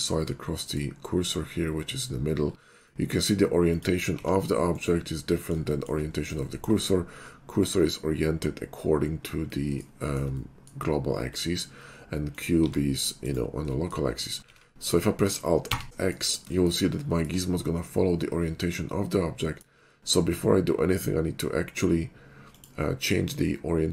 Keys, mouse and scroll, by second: 0.1-1.7 middle drag, 1.9 middle click, 3.0 middle click, 3.7 click, 4.2 r, 4.7 right click, 6.5 shift+middle click, 9.0 middle click, 9.7 middle click, 10.3 3, 10.5 middle click, 12.3 click, 12.6 r, 13.2 right click, 13.6 middle click, 14.6 alt+x, 15.7 x, 15.9 middle click, 16.5 middle click, 18.6-19.6 middle drag, 22.6 click.